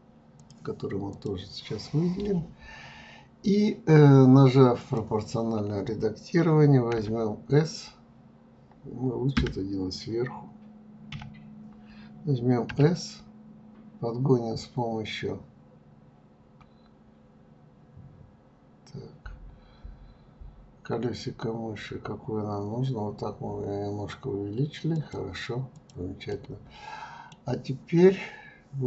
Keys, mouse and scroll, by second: 0.4 click, 1.1 click, 4.8 click, 25.7 click, 26.3-28.8 middle drag.